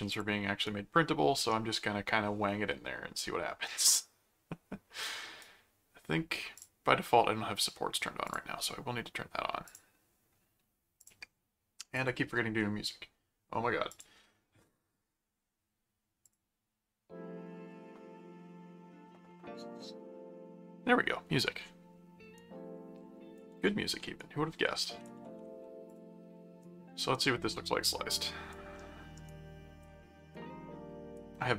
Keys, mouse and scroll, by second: 0.1 click, 0.6-5.4 right drag, 6.5 click, 8.3 click, 9.7 click, 11.0 click, 11.9 click, 13.9 click, 16.2 click, 22.3 right click, 23.8 ctrl+r, 24.2 right click, 24.7 ctrl+r, 25.9 click, 26.6 right click, 27.2 right click, 27.7 middle click, 28.1 right click, 28.7 middle click, 29.2 right click, 30.0 middle click, 30.3 right click.